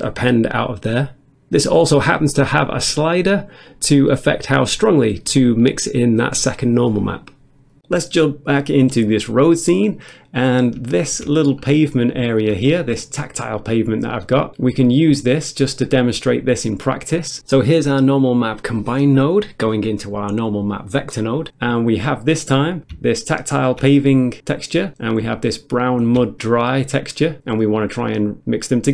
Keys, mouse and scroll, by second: 10.4 middle click, 10.7 middle click, 10.9 shift+middle click, 11.4 scroll up 1, 11.9 middle click, 12.1 middle click, 12.2 shift+middle click, 15.2 middle click, 15.8 middle click, 17.7 middle click, 17.7 scroll up 1, 18.0 middle click, 18.8 click, 18.8 scroll up 1, 20.6 click, 21.1 middle click, 22.0 middle click, 23.2 ctrl+shift+click, 25.4 ctrl+shift+click.